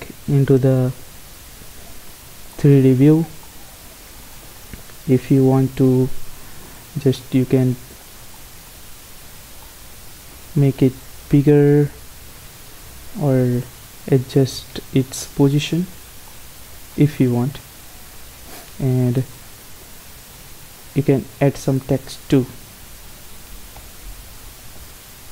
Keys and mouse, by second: 3.3-4.4 middle drag, 4.4-6.1 right drag, 5.3 r, 7.2 middle click, 11.3 s, 13.6-15.1 drag, 14.6 g, 16.1-18.9 middle drag, 19.1 shift+a, 23.4 Tab, 23.9-25.3 typing.